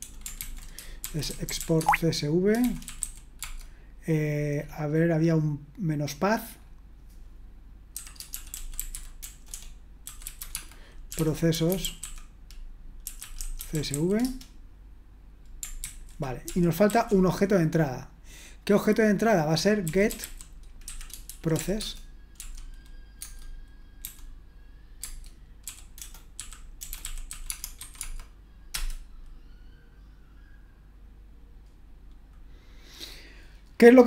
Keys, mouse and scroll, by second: 0.0-3.5 typing, 0.4 ctrl+c, 4.5-5.7 scroll up 1, 8.1-14.4 typing, 15.8 ctrl+c, 16.5 ctrl+p, 16.9 ctrl+a, 19.6-28.3 typing, 23.2 Tab, 25.0 Tab, 28.7 Return.